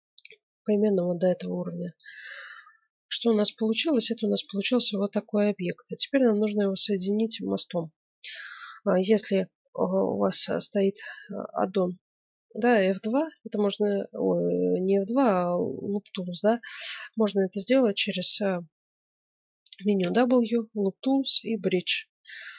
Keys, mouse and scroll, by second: 2.3-3.5 middle drag, 3.5 z, 19.9 w.